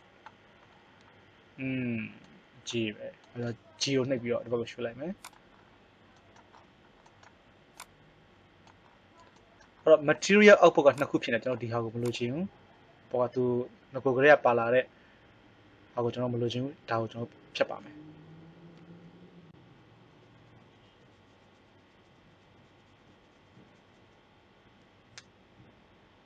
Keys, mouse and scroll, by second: 4.0 g, 8.1-9.7 right drag, 9.7-12.1 drag, 21.7-23.5 right drag, 23.9 click.